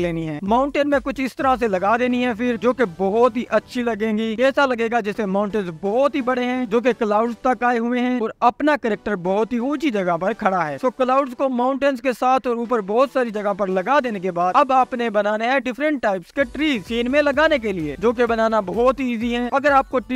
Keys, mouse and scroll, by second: 0.1 click, 0.6 s, 1.3 scroll up 4, 2.1 click, 2.8 click, 3.2 click, 4.1 click, 5.1 scroll down 2, 5.6 alt+d, 5.8 click, 6.8 s, 7.2 click, 7.5 s, 7.8 click, 9.1 scroll down 1, 10.1 shift+a, 12.0 click, 12.6 s, 13.0 click, 13.6 s, 14.0 click, 14.6 click, 14.8 s, 15.1 click, 16.5 click, 17.5 shift+a, 18.9 s, 19.2 click, 19.8 scroll up 4, 20.0 s.